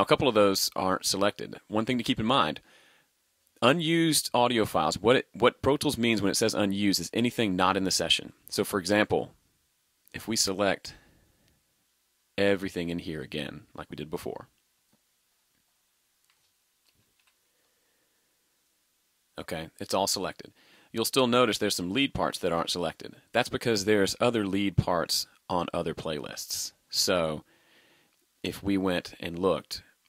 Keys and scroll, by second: 16.9 super+[.